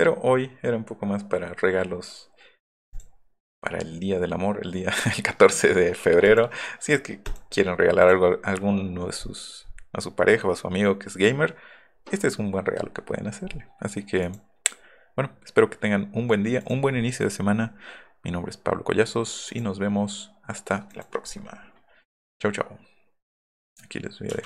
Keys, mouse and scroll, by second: 8.7 scroll down 2, 14.2 scroll down 2.